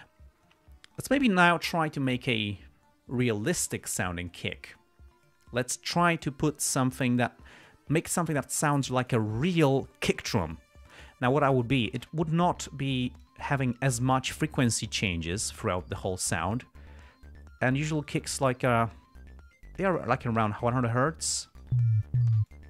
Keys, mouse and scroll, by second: 12.1 click, 13.5 click, 17.4-20.5 drag, 21.2-22.1 drag.